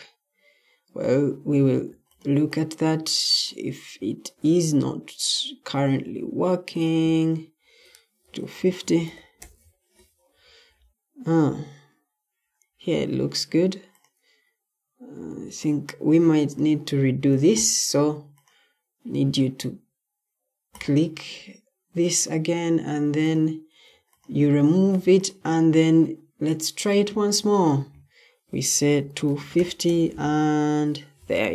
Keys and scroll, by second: 1.2 typing, 1.8 Escape, 4.3 Escape, 8.1-11.2 typing, 10.3 Escape, 12.4-13.2 typing, 17.2 Escape, 23.8 Escape, 28.6-31.5 typing.